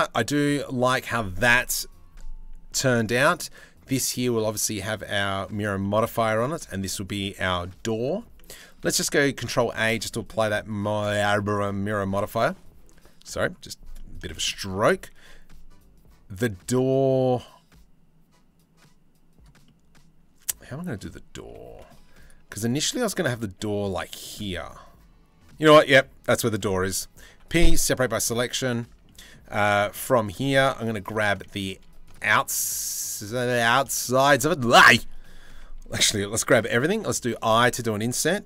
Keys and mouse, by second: 2.9 click, 4.6 click, 5.4 middle click, 5.8 shift+middle click, 8.6 ctrl+a, 9.2 Tab, 9.6 shift+middle click, 9.8 middle click, 12.3-13.7 middle drag, 13.9 shift+middle click, 14.2 click, 19.2-20.3 middle drag, 21.0 middle click, 21.8 click, 22.3-23.8 shift+drag, 24.0-25.1 middle drag, 25.3 shift+middle click, 26.9 p, 27.7 Tab, 28.5 Tab, 30.4 2, 33.7 shift+click, 33.9 click, 35.5 a, 35.8 click, 36.5 i.